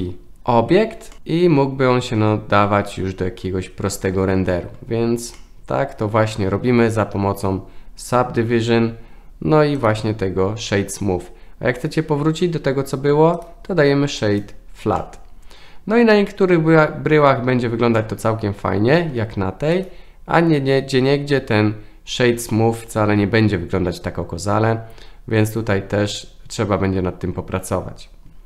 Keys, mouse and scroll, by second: 0.4 KP_0, 1.1-2.7 middle drag, 5.4-6.5 middle drag, 9.9-12.4 right drag, 13.4-14.4 right drag, 15.0-16.1 middle drag, 18.0-19.0 middle drag, 19.8-22.5 right drag.